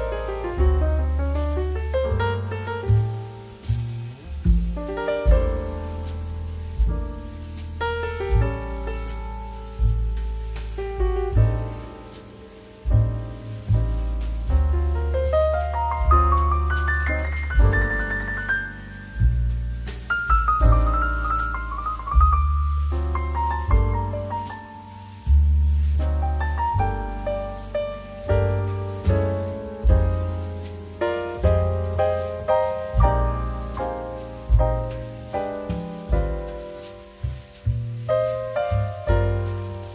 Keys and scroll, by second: 1.4 space, 4.3 space, 6.4 space, 8.7 space, 12.4 space, 15.6 space, 23.1 space, 28.2 space, 38.4 space.